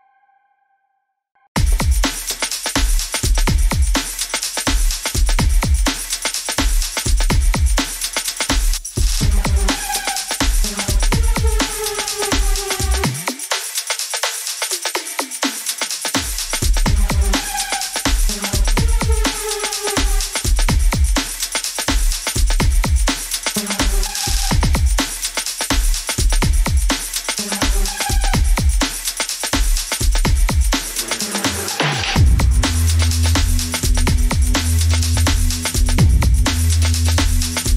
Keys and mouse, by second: 6.3 middle click, 7.1 shift+middle click, 8.2-10.0 middle drag, 20.0 ctrl+r, 26.9 middle click, 28.8 ctrl+r, 36.9-37.7 middle drag.